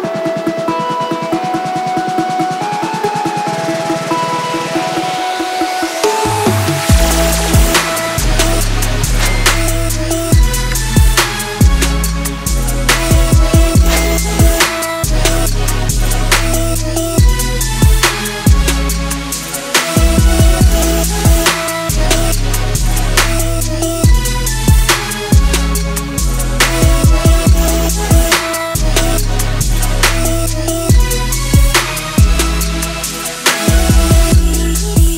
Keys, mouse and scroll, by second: 0.1 right click, 1.0 click, 1.6 right click, 3.4 click, 4.4-5.3 typing, 5.9 click, 7.7 ctrl+space, 8.1-11.6 typing, 9.8 click, 11.8-21.0 drag, 21.0-21.4 scroll down 1, 21.4 middle click, 22.5-25.4 drag, 27.6-30.3 drag, 33.9 ctrl+space, 34.6-35.1 typing.